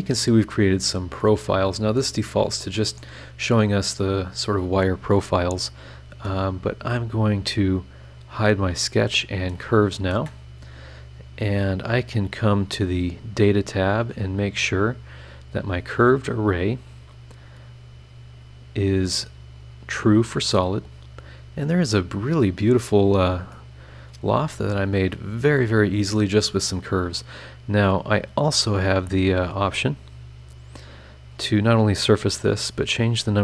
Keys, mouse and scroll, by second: 1.3-3.2 drag, 3.5 scroll up 1, 3.7-7.4 middle drag, 7.4 click, 7.7 middle click, 8.1 click, 8.4 space, 8.8 click, 9.0 space, 9.4 click, 9.9 click, 10.1 space, 15.3 click, 17.8-18.5 scroll down 2, 19.1 click, 19.5 click, 20.3 click, 21.0 click, 23.5-25.8 middle drag, 23.6-25.8 right drag, 25.8 click, 27.3 click.